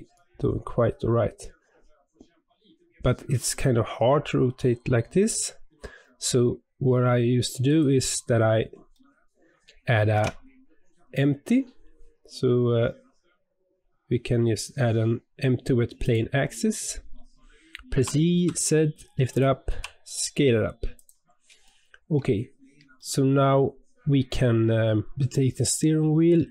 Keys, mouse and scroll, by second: 8.3 scroll down 2, 8.9-10.1 middle drag, 10.1 shift+a, 17.9 g, 19.6 s, 21.6-23.6 shift+middle drag, 23.6-25.1 scroll up 1, 25.1 click.